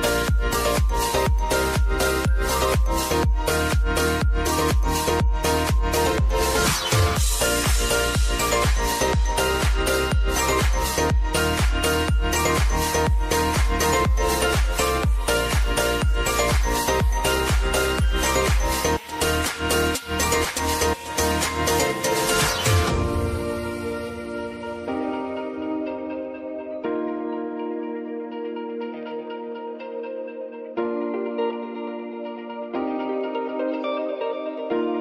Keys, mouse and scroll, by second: 11.2-28.3 drag, 28.3 space, 30.1 click, 30.5 u, 31.4 click, 33.0 space.